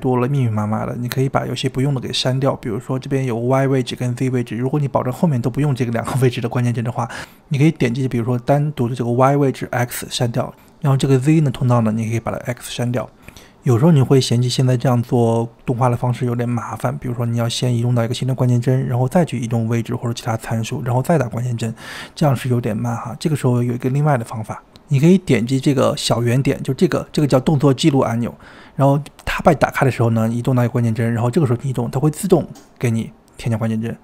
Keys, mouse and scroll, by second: 5.2-7.8 drag, 8.7 click, 9.9 x, 10.6 click, 11.5 x, 13.7-14.9 drag, 15.7 click, 15.8 click, 17.3-18.2 drag, 18.9-19.8 drag, 20.7-22.6 drag, 23.2-24.1 drag, 24.3 click, 24.4 g, 25.2 ctrl+z, 25.9-27.2 drag, 28.1 click, 29.5-30.8 drag, 31.1 g, 33.1-34.0 drag.